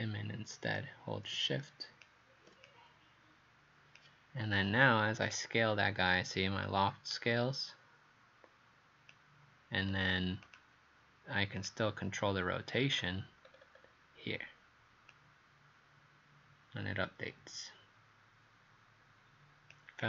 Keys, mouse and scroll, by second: 9.9 Page_Up, 10.5 click, 12.3-13.2 scroll down 5, 13.5 scroll up 2.